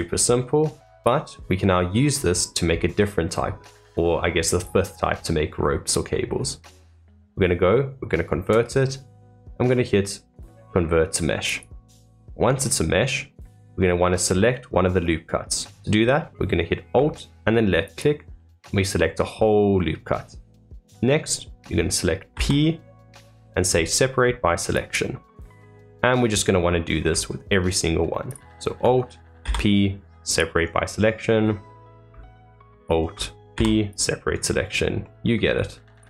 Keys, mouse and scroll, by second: 0.8 click, 5.6 scroll up 2, 6.1 middle click, 6.6-9.7 right drag, 12.4 Tab, 13.0-17.2 middle drag, 17.2 click, 17.8 alt+click, 25.4-28.2 middle drag, 28.2-29.4 alt+drag, 30.7-32.7 middle drag, 32.7 alt+click, 34.3-35.9 middle drag, 35.9 alt+click.